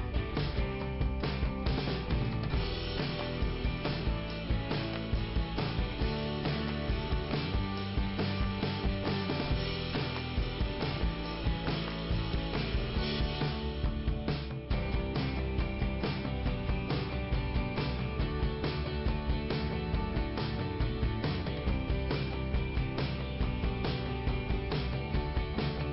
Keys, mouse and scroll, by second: 1.2 click, 1.4 click, 1.9 scroll down 1, 3.8 click, 7.6 scroll up 1, 9.1 click, 10.2 click, 14.1 scroll up 2, 23.7 middle click, 24.7 scroll up 1.